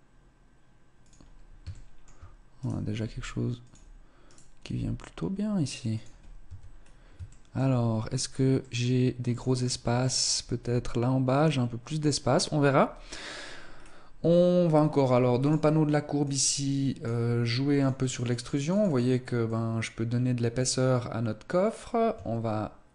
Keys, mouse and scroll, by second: 1.7 shift+middle click, 2.5 right click, 2.9 g, 4.1 right click, 4.5 g, 6.1-6.9 scroll down 4, 6.3 Tab, 6.9 shift+middle click, 8.5 middle click, 9.8 scroll down 1, 10.5-11.5 scroll up 3, 12.2-13.1 scroll down 1, 13.7 scroll down 2, 15.3 click, 16.1 click, 17.7 click, 18.1 click, 18.3 click, 18.5 click, 18.7 click, 18.9 click, 19.3 click.